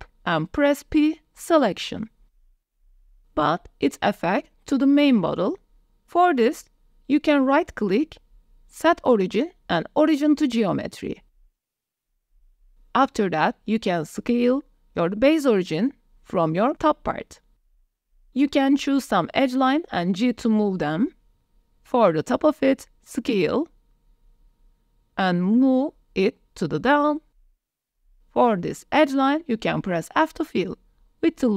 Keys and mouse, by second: 0.3 p, 2.2 Tab, 3.1 s, 3.5 shift+middle drag, 8.2-11.9 drag, 12.8 s, 15.0 shift+middle click, 15.6 Tab, 15.7 shift+middle click, 15.9 middle click, 16.5 click, 17.3 click, 17.7 2, 17.9 alt+click, 18.2 g, 18.3 z, 18.9 click, 19.2 s, 19.4 click, 20.4 click, 20.8 f, 20.9 click, 21.6 click, 22.0 s, 22.9 click, 23.7 Tab, 24.3 g, 24.6 z, 26.3 click, 27.3 Tab, 27.3 shift+click, 28.7 f, 29.6 click, 31.0 ctrl+r.